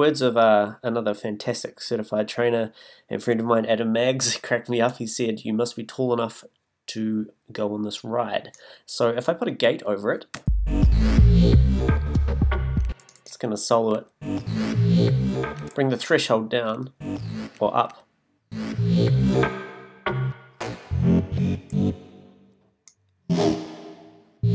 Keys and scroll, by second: 10.3 space, 12.8 space, 15.6 space.